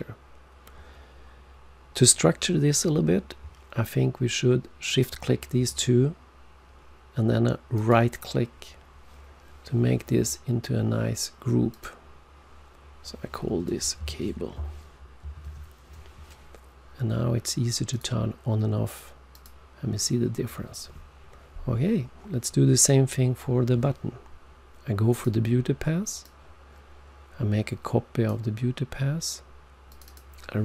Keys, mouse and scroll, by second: 4.9 shift+click, 7.7 right click, 11.7 click, 15.5-16.2 typing, 17.0 Return, 17.9 click, 19.3 click, 25.1 click, 26.2 click, 29.9 click, 30.1 double click.